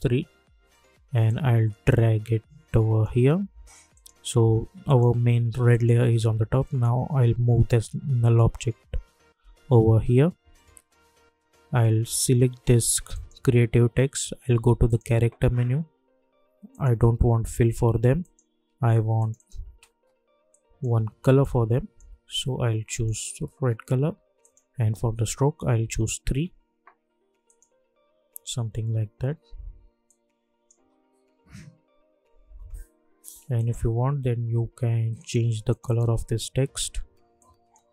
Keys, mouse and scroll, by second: 7.5 Up, 13.1-22.9 drag, 25.8 Return, 27.4 click, 30.0 click, 30.8 space, 33.5 click.